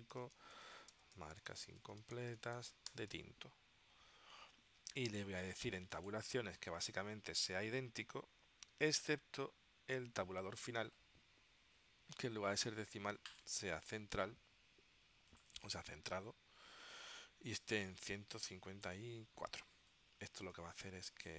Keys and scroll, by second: 0.0-3.0 typing.